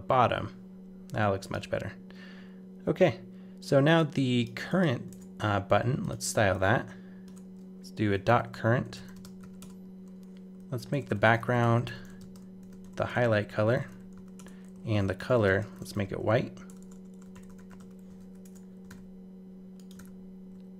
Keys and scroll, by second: 5.1 super+Tab, 18.2 super+s, 18.4 super+Tab, 18.9 super+r.